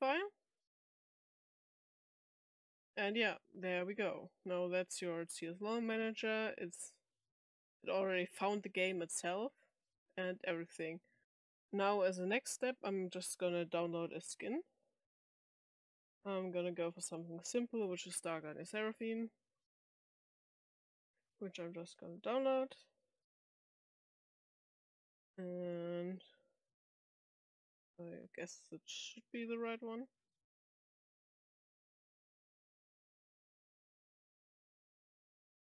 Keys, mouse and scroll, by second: 3.3 click, 4.5 click, 5.4 click, 8.2 click, 8.8 click, 9.6 click, 10.4-10.7 drag, 13.2 click, 14.0-15.5 scroll up 2, 17.1 click, 18.9-20.3 scroll down 8, 20.8 middle click, 21.8 click, 25.5 click, 26.2 click, 30.3 click.